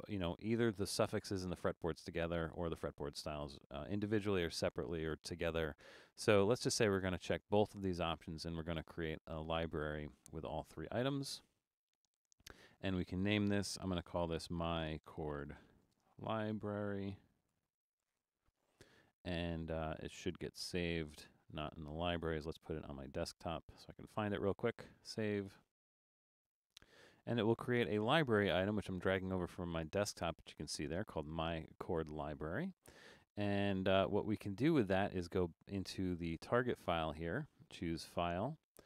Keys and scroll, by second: 14.1-18.7 typing.